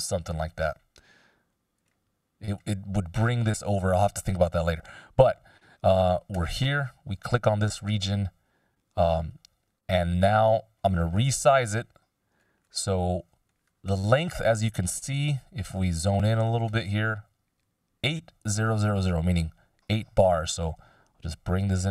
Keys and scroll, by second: 0.5 shift+\, 11.5 Delete.